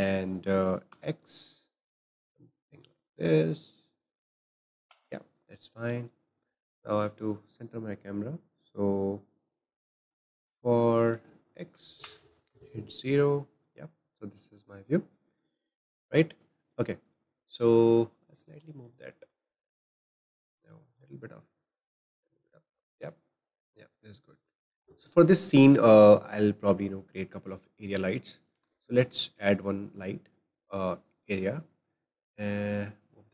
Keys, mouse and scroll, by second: 4.9 Tab, 5.5-6.0 scroll down 1, 6.1 click, 7.2 click, 12.0-13.6 drag, 15.1 click, 15.6 click, 17.1 click, 20.9 click, 24.7-31.2 drag, 24.7 shift+a, 25.1 middle click, 26.8 middle click, 28.5 shift+a, 31.2 shift+a, 32.9 click.